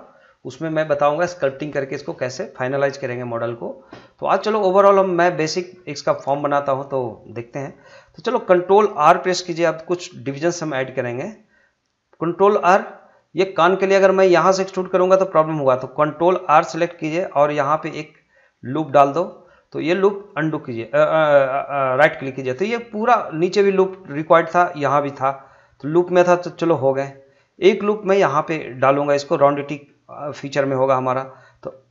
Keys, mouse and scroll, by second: 4.2 middle click, 4.7 scroll up 1, 5.0 middle click, 7.7 scroll down 1, 7.9 middle click, 8.3-8.7 scroll down 1, 10.3 shift+r, 11.0-17.1 middle drag, 17.1 ctrl+r, 19.3 click, 20.3 right click, 26.5 scroll up 1, 26.7 middle click, 27.9 scroll up 1, 28.0 middle click.